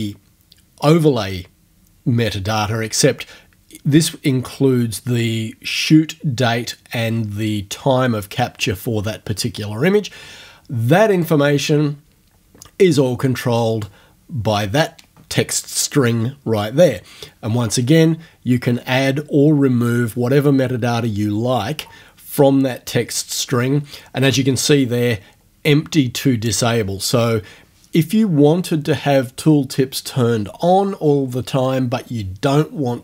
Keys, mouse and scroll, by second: 11.1 click, 13.3 click.